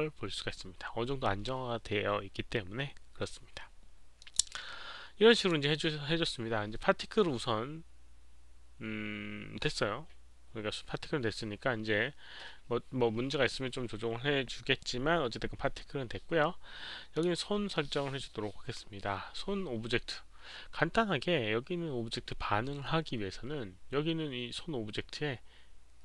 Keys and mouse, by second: 4.2 click, 5.3 click, 17.1 click.